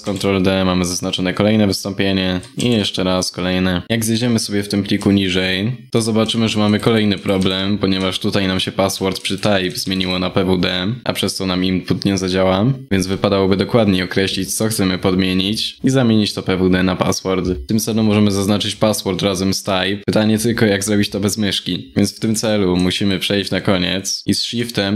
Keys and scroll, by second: 2.2 ctrl+d.